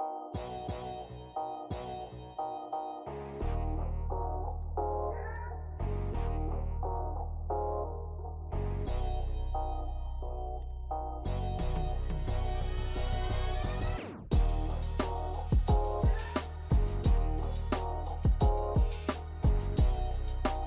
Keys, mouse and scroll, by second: 1.7 click, 2.4 ctrl+middle click, 3.1 middle click, 3.4 ctrl+middle click, 3.7 shift+a, 6.7 ctrl+alt+KP_0, 9.2 click, 11.1 click, 12.7 click, 13.9 click, 15.6 click, 16.2 click, 18.1 click, 18.9 click, 19.9 0.